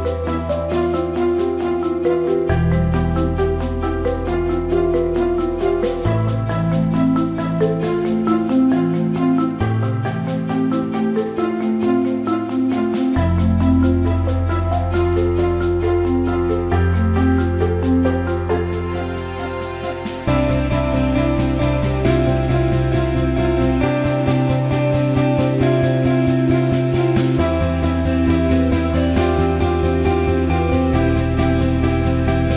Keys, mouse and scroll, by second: 0.6 alt+middle click, 1.7 alt+shift+middle click, 2.0 alt+middle click, 2.9 alt+middle click, 5.9 click, 6.3 alt+middle click, 7.6 alt+shift+middle click, 8.4-11.1 drag, 16.3 click, 22.2 click, 29.7-30.4 alt+middle drag, 30.6 alt+shift+middle drag.